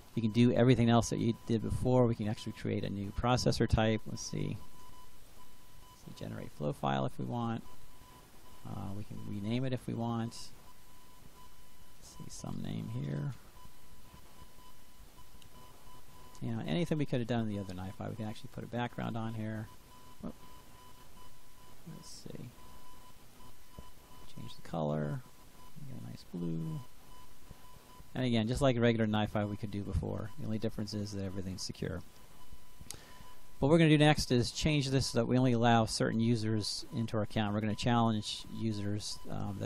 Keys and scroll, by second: 3.7-5.7 typing, 11.6-14.4 typing.